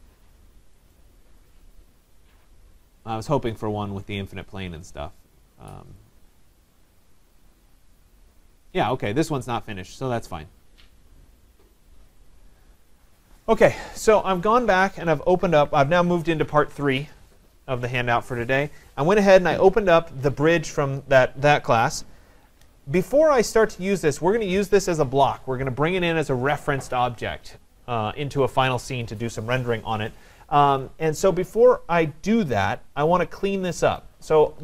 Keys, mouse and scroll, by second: 0.1 middle click, 0.1 middle click, 0.3 middle click, 1.0 right click, 3.2 click, 5.0 click, 6.1 click, 7.9 click, 9.9 click, 12.3 click, 12.9 click, 13.7 middle click, 13.8 middle click, 24.1-29.1 drag.